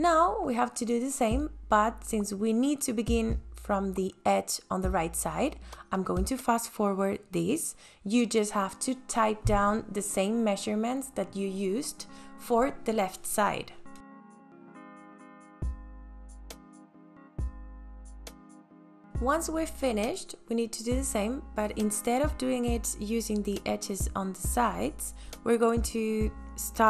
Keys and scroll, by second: 4.1 ctrl+s, 11.7 t, 14.6-17.4 typing, 16.7 KP_Enter, 18.4 KP_4.